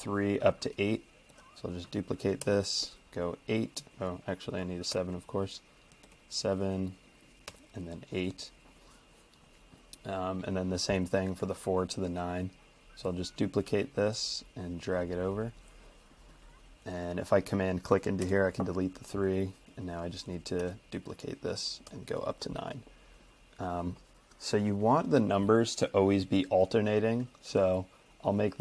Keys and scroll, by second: 1.3 super+d, 2.4 8, 3.9 Escape, 4.9 typing, 5.4 Escape, 6.1 super+d, 7.5 8, 8.1 Escape, 12.0 super+d, 18.2 BackSpace, 20.6 super+d, 21.9 9.